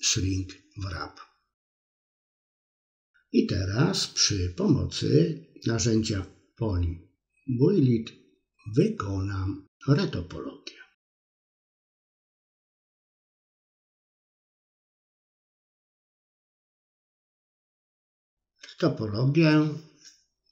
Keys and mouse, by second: 0.1 KP_3, 0.9 middle click, 2.3 click, 2.6 middle click, 3.5 middle click, 4.6 click, 5.4 middle click, 6.1 click, 6.6 click, 7.2 KP_1, 7.8 click, 8.7 click, 9.5 click, 10.0 middle click, 10.7 click, 11.6 ctrl+KP_1, 12.7 middle click, 13.0-14.3 middle drag, 14.6 click, 15.2 middle click, 15.8 click, 16.3 middle click, 16.9 click, 17.7 KP_1, 19.1 click, 20.0 click.